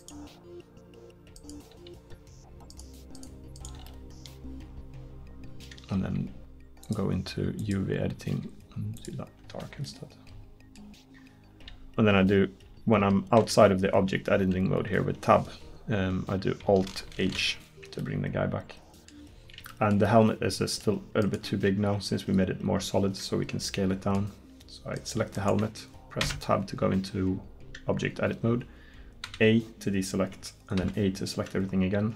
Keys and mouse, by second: 8.4 g, 9.6 Tab, 13.1 Tab, 13.5 Tab, 17.2 alt+h, 21.3-23.7 right drag, 26.3 Tab, 29.3 a, 30.8 a.